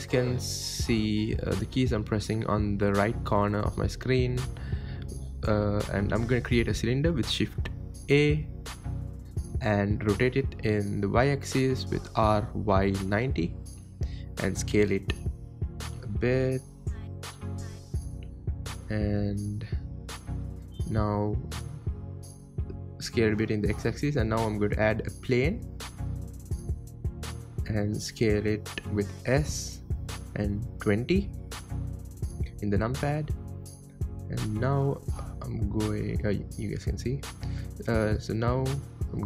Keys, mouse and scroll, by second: 0.3-1.9 middle drag, 1.9 shift+a, 4.8-5.2 scroll up 2, 5.2-6.3 middle drag, 6.3 r, 8.0 r, 11.9-12.9 middle drag, 12.9 s, 18.6-20.6 middle drag, 20.6 s, 21.6-22.4 middle drag, 22.4 scroll down 2, 22.8 shift+a, 26.7 KP_7, 28.2 ctrl+z, 29.0-29.4 scroll up 1, 29.4 s, 31.2-31.6 scroll down 6, 31.6-33.4 scroll up 4, 33.4 n, 34.4 click, 35.8 n, 37.3-37.8 scroll down 1, 37.8 g.